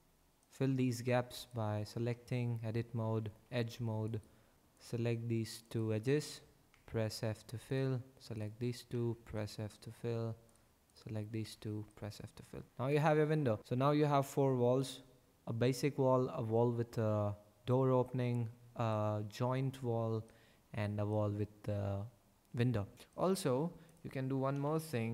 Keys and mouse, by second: 2.0 Tab, 3.4 2, 4.7 click, 5.5 shift+click, 6.7 f, 7.6 click, 8.8 f, 10.8 shift+middle click, 11.4 f, 18.9 middle click, 23.9 click, 24.5 KP_5, 24.6 KP_1, 24.9 Tab.